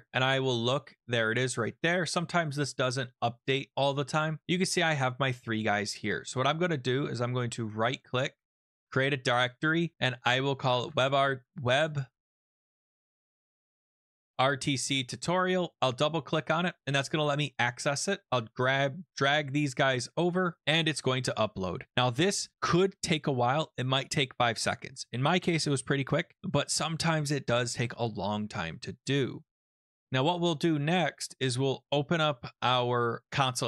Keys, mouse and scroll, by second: 0.1-0.8 scroll, 0.8 scroll, 0.9 click, 1.5 click, 1.6 click, 2.9 scroll, 5.3 click, 6.1 scroll, 7.0 right click, 8.8 click, 10.5-14.9 typing, 11.2 middle click, 14.7-15.7 scroll, 15.7 click, 15.8 click, 16.8 typing, 18.3 click, 19.7 click, 31.8-33.3 drag.